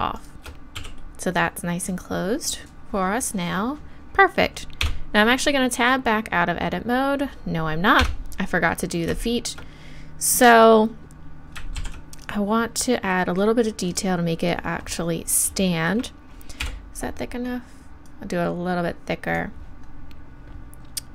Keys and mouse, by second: 0.8 f, 4.8 Tab, 8.0 Tab, 11.8 ctrl+r, 13.9-16.6 drag, 16.6 KP_1, 18.1-19.9 drag.